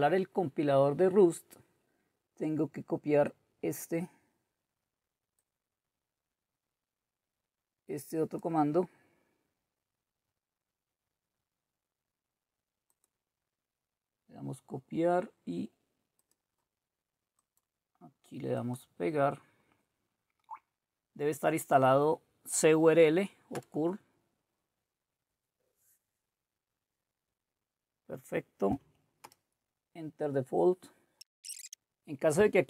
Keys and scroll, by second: 20.5 Right, 23.5 Return, 29.3 Return.